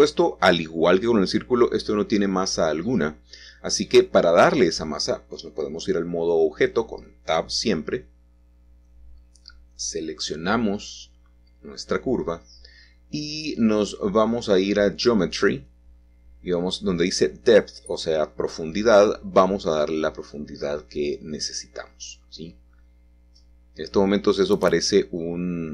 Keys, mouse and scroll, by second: 2.1 shift+click, 3.2 Tab, 4.1-6.8 middle drag, 7.6-8.7 drag, 9.8 shift+middle click, 10.5-11.4 shift+scroll down 2, 13.0 click, 18.3-21.3 drag, 18.7-22.0 middle drag, 22.0 s, 22.2 z, 23.1 Escape, 25.3-25.7 scroll down 2.